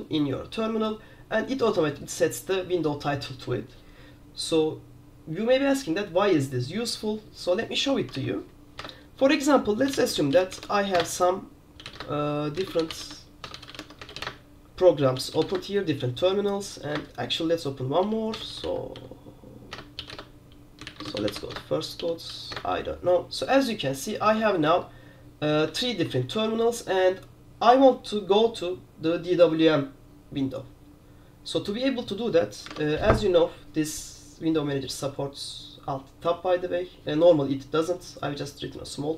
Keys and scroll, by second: 8.4 super+2, 8.9 super+Return, 9.8-16.0 typing, 16.6 super+3, 17.0 super+Return, 17.9-22.6 typing, 19.8 Return, 20.3 Return, 22.6 Return, 24.7 super+2, 24.7 super+1, 25.9 super+2, 26.0 super+3, 26.4 super+4, 32.8 alt+Tab.